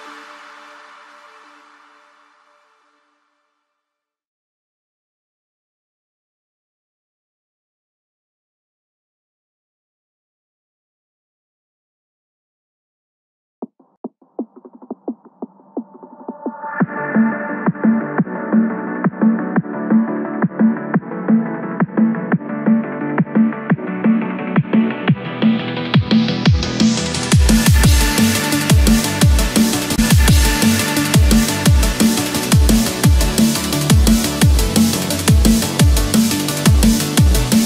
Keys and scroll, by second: 6.0 Escape, 8.2 Return, 8.7 Escape, 14.7 Return, 15.2 Escape, 18.9 Return, 19.5 Escape, 20.5 ctrl+-, 20.9 ctrl+0, 23.7 ctrl+=, 23.9 ctrl+space, 24.1 ctrl+=, 26.2 ctrl+-, 29.9 Return, 30.6 Escape.